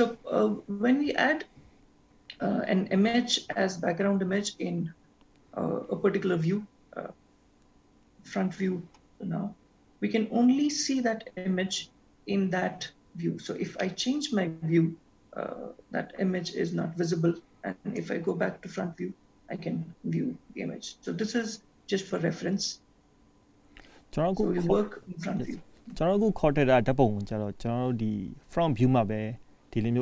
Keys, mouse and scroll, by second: 13.9 middle click, 23.8-26.6 scroll up 1.